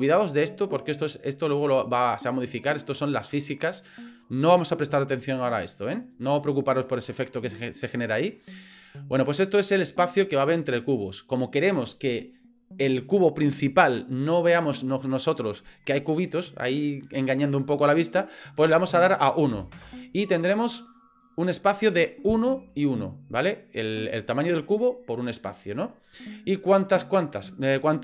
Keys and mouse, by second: 10.1-11.3 drag, 18.7-20.8 drag, 26.8-28.0 drag.